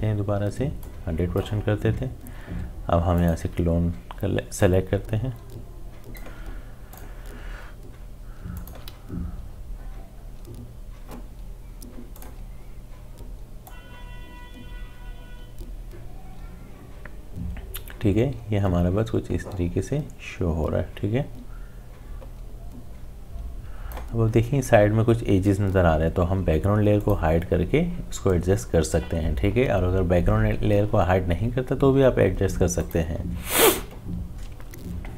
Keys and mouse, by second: 8.5 alt+click, 12.1-23.6 drag, 27.0 click, 32.8 click.